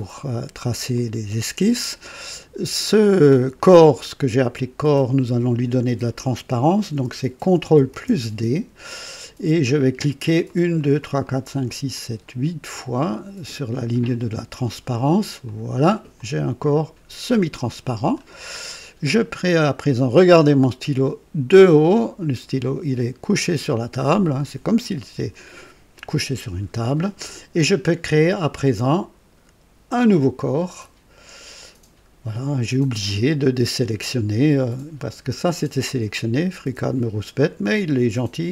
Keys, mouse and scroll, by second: 0.9 click, 2.8 click, 3.6-4.0 scroll down 1, 4.3 right click, 7.9 ctrl+d, 10.4 click, 11.0 typing, 12.4 click, 15.4 click, 16.1-18.3 drag, 19.2 click, 20.4 right click, 22.0-22.3 scroll down 2, 24.1 scroll up 2, 25.0-26.4 right drag, 30.0 click, 37.3 click.